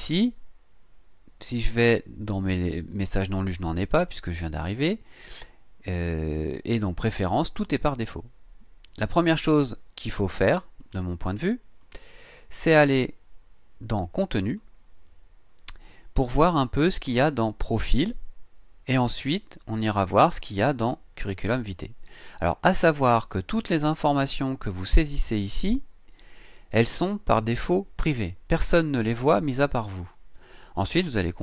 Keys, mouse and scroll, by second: 9.2 click, 10.8 click, 11.8 click, 12.2 click, 14.4 click.